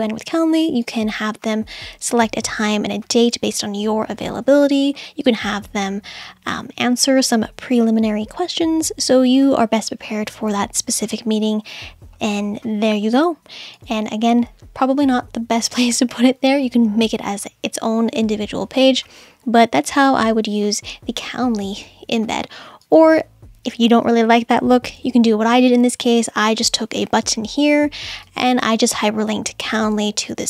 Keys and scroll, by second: 25.1 BackSpace.